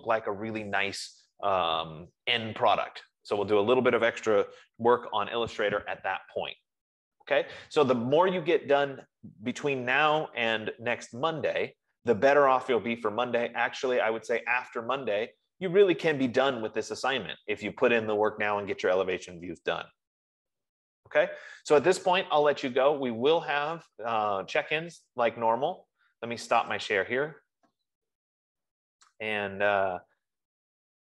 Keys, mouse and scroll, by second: 24.0 F15.